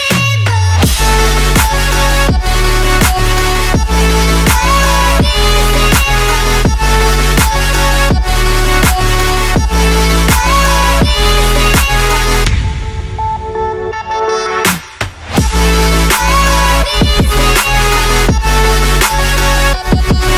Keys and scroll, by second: 0.0 super+i, 0.2-1.0 typing, 3.8 space, 4.1 ], 5.5 [, 6.4 ], 7.9 [, 8.9 ], 9.3 ], 10.2 ], 11.3 ], 13.5 ], 14.5 alt+shift+super+e, 14.9 alt+shift+super+j, 15.8 Return, 17.5 super+j, 18.2 alt+shift+super+e, 18.6 BackSpace, 19.2 shift+super+BackSpace, 19.6 shift+super+e.